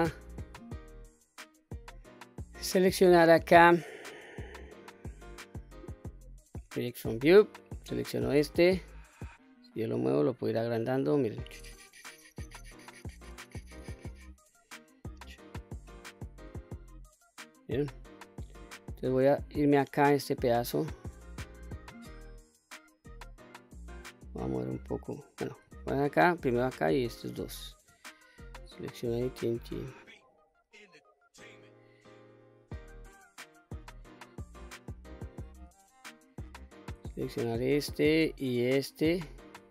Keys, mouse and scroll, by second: 1.5 click, 2.6-6.2 drag, 7.5 click, 9.1-15.5 drag, 10.0-10.7 scroll up 1, 10.7 scroll down 1, 10.8-12.3 scroll down 7, 12.3-12.9 scroll down 2, 13.3-13.9 scroll down 3, 14.6-15.0 scroll down 3, 19.5 click, 21.9-25.1 drag, 25.7 ctrl+z, 26.9 shift+click, 28.3-33.3 drag, 29.4-30.0 scroll down 3, 30.0-31.2 scroll up 4, 31.2-31.8 scroll down 3, 35.7 shift+middle click, 37.3 click, 38.6 shift+click.